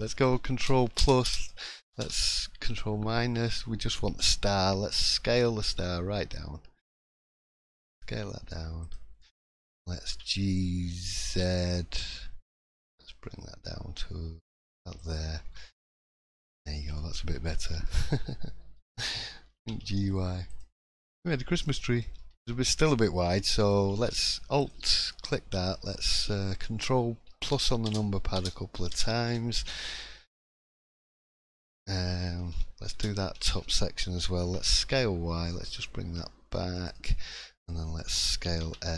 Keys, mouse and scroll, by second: 0.9 ctrl+KP_Add, 2.0 ctrl+KP_Subtract, 3.1 middle click, 3.5-3.9 scroll up 1, 3.9 middle click, 4.8 s, 9.2 middle click, 9.5-10.1 scroll up 2, 10.1 g, 15.3-16.2 scroll down 6, 15.8-16.3 scroll up 4, 16.2 click, 16.5-17.6 scroll down 4, 16.9 shift+middle click, 17.6 middle click, 18.8 l, 19.6 g, 20.8 click, 21.1 middle click, 21.7 middle click, 22.0-23.0 scroll up 4, 22.4 shift+middle click, 23.4 shift+middle click, 24.6 alt+click, 25.1 middle click, 27.5 ctrl+KP_Add, 30.6 middle click, 31.2 scroll up 1, 32.9 ctrl+KP_Add, 34.4 s, 37.0 middle click, 38.3 s.